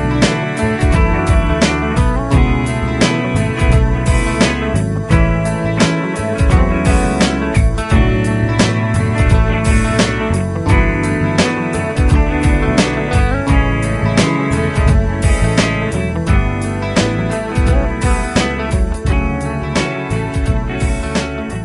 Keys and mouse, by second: 0.6 |.